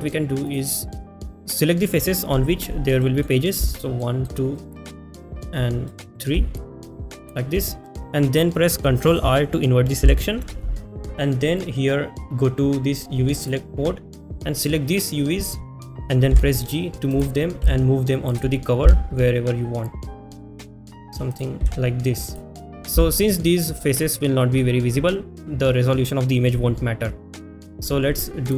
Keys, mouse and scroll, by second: 16.6 g, 19.1 s, 23.0-24.7 shift+middle drag.